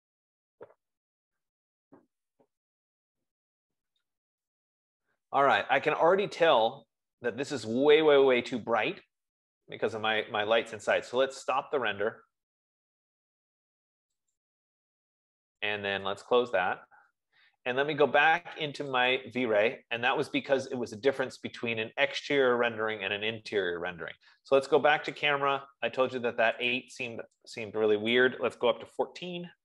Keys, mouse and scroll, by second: 11.6-15.0 drag, 17.0 click, 19.7 click, 25.6 click, 27.2 click, 28.6 click, 28.9-29.6 typing.